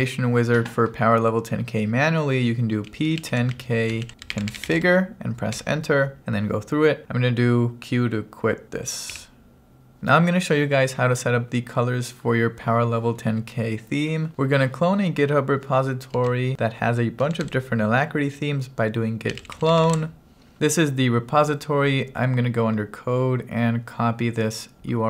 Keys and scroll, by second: 2.7-5.3 typing, 5.6 Return, 9.1 q, 16.2 g, 17.3 t, 17.5 space, 19.1-20.2 typing.